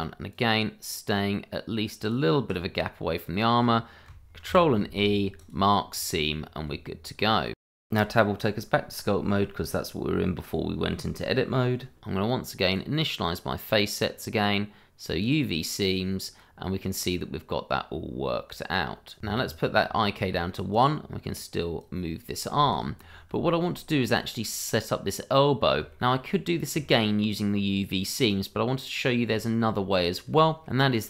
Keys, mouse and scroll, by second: 0.3 ctrl+click, 2.0 ctrl+click, 2.6-3.0 scroll down 1, 3.4-4.1 scroll up 1, 4.5 ctrl+e, 5.4 click, 5.9-6.3 scroll down 1, 6.7 Tab, 9.4 middle click, 12.6 middle click, 15.2 click, 16.5 scroll down 1, 19.3 scroll up 1, 19.6 click, 21.0 1, 21.1 click, 22.6 ctrl+z, 23.2 scroll down 1, 23.5 shift+middle click, 24.1 middle click, 25.9 shift+middle click, 26.0 middle click, 26.3-26.7 scroll up 1, 26.8 shift+middle click, 26.9 middle click, 27.3-27.7 scroll down 1, 27.7 middle click, 28.3-28.7 scroll up 1, 28.7 middle click, 29.3 shift+middle click, 29.9-30.3 scroll down 1, 30.3 shift+middle click, 30.8-31.0 scroll up 1.